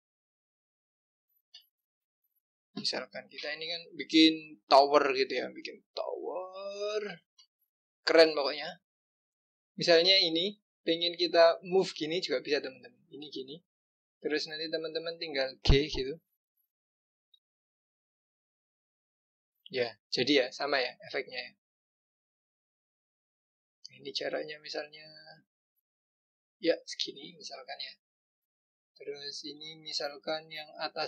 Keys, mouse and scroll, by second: 0.6 click, 3.5-5.4 scroll down 2, 5.4 click, 8.1 scroll down 2, 9.2 click, 9.8 click, 11.7-14.7 drag, 17.3 g, 23.7 g, 27.3 click, 27.8-29.6 scroll down 2, 30.7 click.